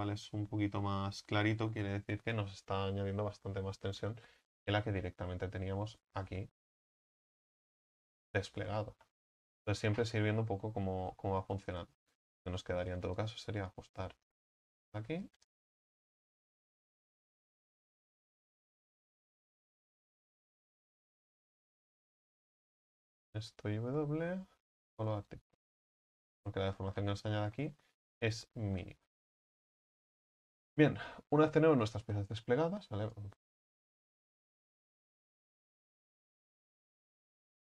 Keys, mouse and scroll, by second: 3.7 ctrl+z, 5.0 ctrl+z, 5.2 ctrl+z, 5.5 ctrl+z, 5.8 ctrl+z, 6.0 ctrl+z, 6.3 ctrl+z, 6.5 ctrl+z, 6.7-7.4 ctrl+z, 11.6-12.9 right drag, 12.9 s, 13.7-15.3 right drag, 15.3 s, 16.1-17.0 alt+shift+right drag, 17.0 s, 17.6 right click, 18.5 s, 19.0 alt+shift+right click, 19.9 s, 22.2-23.1 drag, 23.1-25.4 right drag, 25.4 w, 28.5 a, 28.9 a, 29.4 Tab, 30.3 Tab, 33.1-35.4 right drag, 35.4 click, 36.1 right click, 36.7 s.